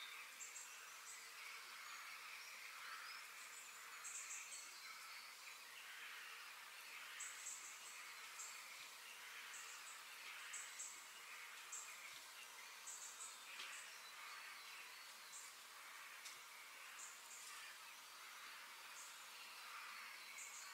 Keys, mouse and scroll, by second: 0.2 click, 0.7 click, 1.0 scroll down 2, 1.2-2.4 middle drag, 2.4 shift+d, 4.3 KP_3, 4.9-7.0 scroll up 4, 7.2 g, 9.8 scroll down 1, 10.0-12.0 middle drag, 17.4 click, 18.4 f.